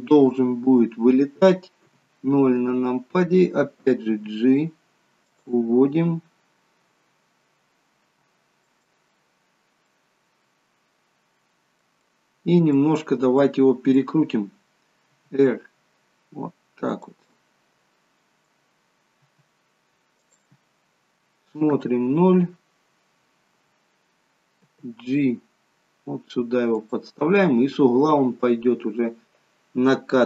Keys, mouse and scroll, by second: 1.9 KP_0, 4.2 g, 8.7 middle click, 9.4 scroll down 2, 9.8 middle click, 12.0 middle click, 13.5 middle click, 15.0 r, 17.2 middle click, 19.3 r, 21.6 KP_0, 24.6 g.